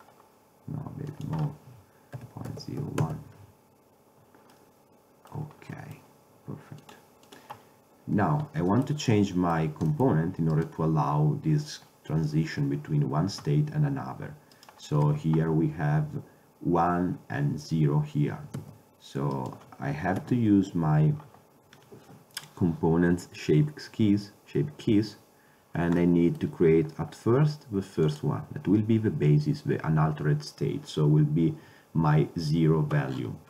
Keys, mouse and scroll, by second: 0.1-1.2 middle drag, 1.2-3.1 drag, 4.7 middle drag, 4.9 middle click, 5.1 middle click, 5.3-5.9 middle drag, 7.9-8.8 drag, 8.8-10.6 middle drag, 10.6-16.7 right drag, 15.7 ctrl+Tab, 19.1 ctrl+Tab, 19.4 right click, 20.3 KP_7, 20.8 KP_Decimal, 26.1-26.5 middle drag, 28.0 middle click, 28.2-30.0 drag, 33.2-33.4 middle drag.